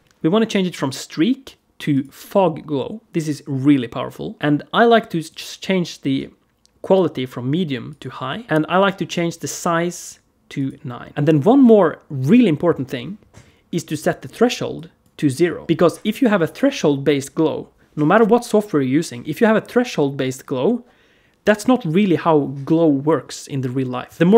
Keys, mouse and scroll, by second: 0.4 click, 5.1 click, 10.4 click, 14.6 click.